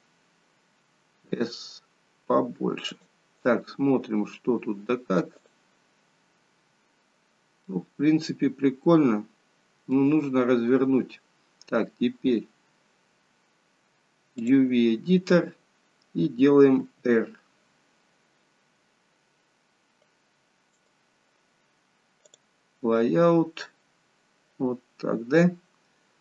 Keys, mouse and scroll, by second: 5.6 click, 7.7 middle click, 22.6 click.